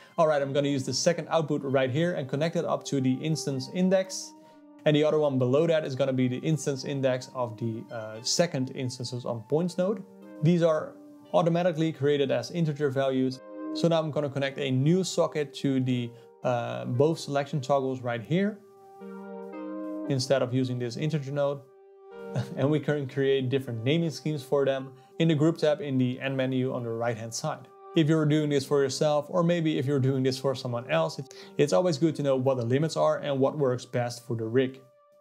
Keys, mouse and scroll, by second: 1.4 click, 6.5 click, 8.6 click, 9.6-12.2 drag, 12.9 click, 13.5 ctrl+v, 14.4 ctrl+v, 14.7 click, 15.8 click, 16.7 click, 19.4 click, 20.9 click, 21.0 x, 21.7 shift+right click, 22.2 g, 23.5 click, 25.0-28.1 drag, 31.0-33.7 drag, 34.9 click.